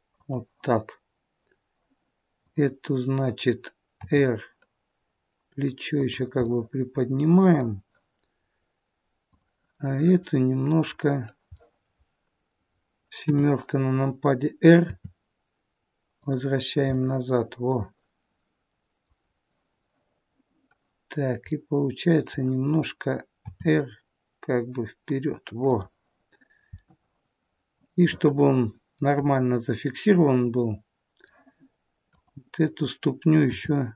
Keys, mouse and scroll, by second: 2.4 click, 4.0 r, 6.5 middle click, 9.3 click, 11.6 middle click, 13.2 KP_7, 14.8 r, 17.0 middle click, 19.3-19.9 scroll down 2, 21.5 middle click, 23.5 r, 26.7 middle click, 29.3 middle click, 31.9 click, 33.4 r.